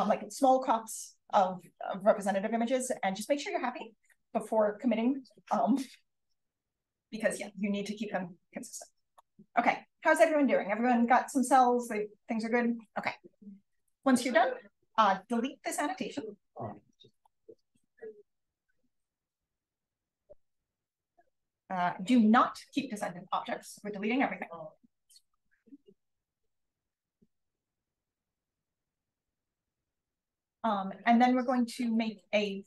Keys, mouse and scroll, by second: 4.3-8.6 scroll down 1, 8.6-9.5 scroll down 1, 9.5-13.7 scroll down 1, 13.7 click, 13.7-14.6 scroll down 1, 13.9 click, 14.6-16.0 scroll down 1, 16.0-17.1 scroll down 1, 17.1 click, 17.1 scroll down 1, 18.9 click, 23.6 click, 29.8-31.9 scroll down 1, 30.6 click.